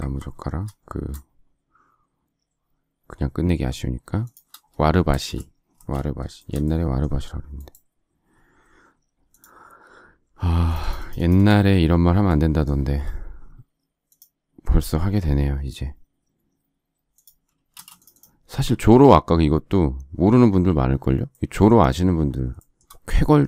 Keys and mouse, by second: 5.0 shift+space, 5.7 space, 12.8 s, 17.7 space.